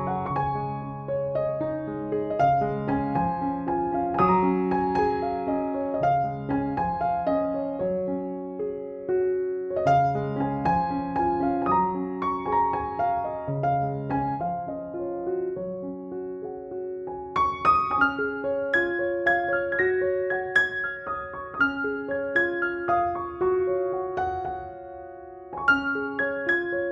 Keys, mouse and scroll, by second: 3.0 click, 12.0 space, 12.2-12.7 click, 13.3 ctrl+=, 14.2 ctrl+j, 14.7 ctrl+u, 16.2-18.5 drag, 24.2 ctrl+=, 26.7-26.9 drag.